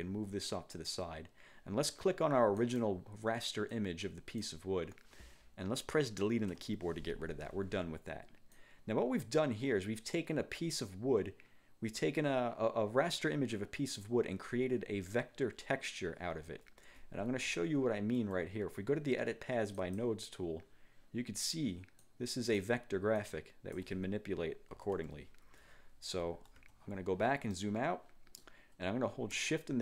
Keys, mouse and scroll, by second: 2.7 click, 3.8 click, 6.6 Delete, 8.6-14.4 drag, 17.7-18.2 ctrl+scroll up 2, 19.9 click, 22.1 click, 23.3 click, 24.8 ctrl+z, 26.4 F1, 26.7 1, 27.6 click.